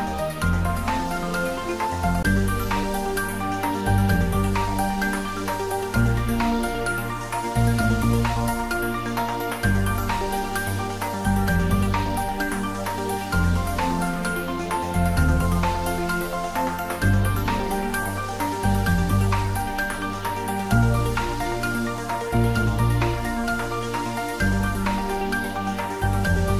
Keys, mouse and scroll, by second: 0.5 ctrl+r, 1.3 click, 3.5 ctrl+r, 4.1 click, 6.0 ctrl+r, 6.4 click, 7.8 ctrl+r, 8.6 click, 10.8-12.6 scroll up 2, 12.9 click, 13.5-14.0 scroll up 1, 14.5 ctrl+r, 17.1 click, 19.3 click, 19.9 ctrl+r, 20.4 click, 22.9 ctrl+r, 23.5 click, 26.1 click.